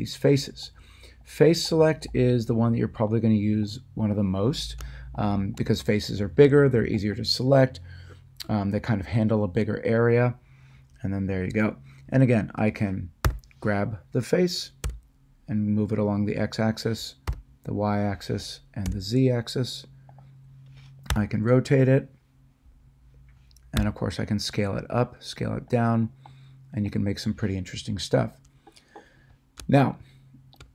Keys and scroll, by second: 13.2 g, 14.8 x, 17.3 y, 18.9 z, 21.1 r, 23.7 s.